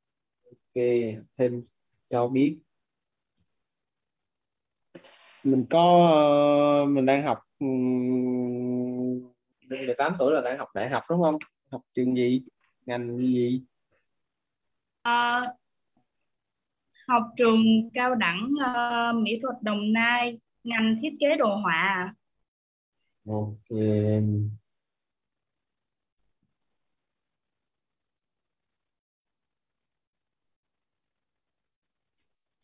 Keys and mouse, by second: 0.0-1.7 typing, 3.2 ,, 23.2-27.0 typing, 28.0-32.6 typing.